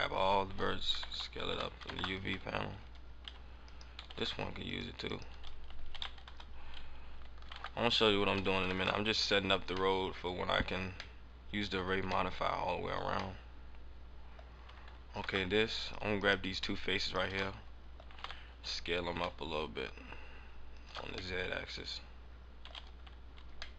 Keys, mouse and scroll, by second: 2.7 scroll down 3, 2.7 s, 3.7 right click, 4.0 ctrl+Tab, 5.0 right click, 5.8 s, 7.5 ctrl+z, 8.7 s, 9.2 Tab, 9.5 scroll down 2, 9.8 middle click, 11.1 middle click, 11.7 scroll up 2, 12.6 middle click, 12.6 scroll up 3, 12.9 scroll down 1, 13.0 scroll down 1, 13.3 middle click, 15.0 Tab, 16.1 right click, 16.9 shift+right click, 17.5 middle click, 18.0 g, 20.8 ctrl+shift+click, 21.3 middle click, 23.7 middle click.